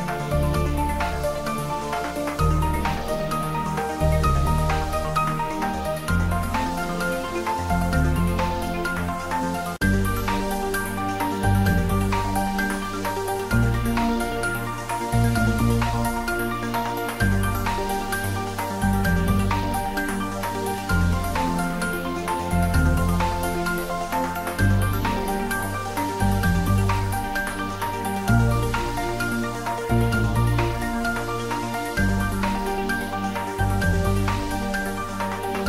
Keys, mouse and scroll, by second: 0.5 click, 1.1 ctrl+middle click, 2.0 click, 3.3 Return, 4.7 click, 5.5 Return, 6.8 ctrl+s, 7.1 ctrl+middle click, 8.0-10.0 ctrl+middle drag, 10.0 shift+a, 10.4 click, 11.2 typing, 12.1-14.6 drag, 13.6-14.3 drag, 14.8 middle click, 18.0-20.9 drag, 20.9 middle click, 21.8-24.6 drag, 24.6-27.6 drag, 27.6-30.0 drag, 30.0 middle click, 30.7-32.0 drag, 32.0 middle click, 32.8-34.3 drag, 34.3 middle click, 34.9 click, 35.5 Return.